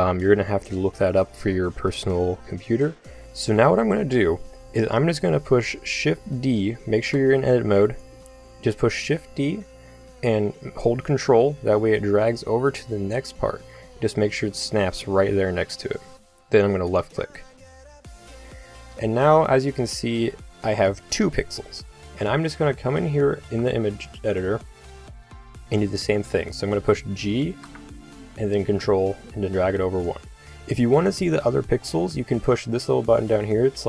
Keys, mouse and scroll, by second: 7.3 Tab, 9.2 shift+d, 19.4-25.6 middle drag, 25.6 g, 27.5 g.